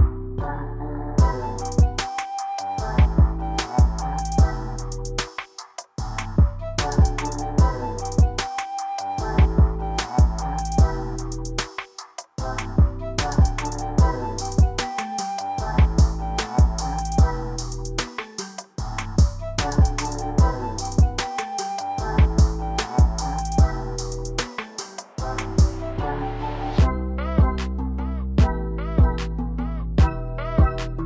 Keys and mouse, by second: 0.6 click, 2.4 click, 3.4-4.4 drag, 6.1 g, 9.5-10.6 drag, 11.2 ctrl+z, 12.5-16.2 drag, 16.6 click, 18.1-18.7 middle drag, 21.6 click, 23.1 middle drag, 23.2 click, 24.3 click, 25.4-26.5 drag, 27.1 KP_7, 28.0 g, 29.6-30.1 middle drag.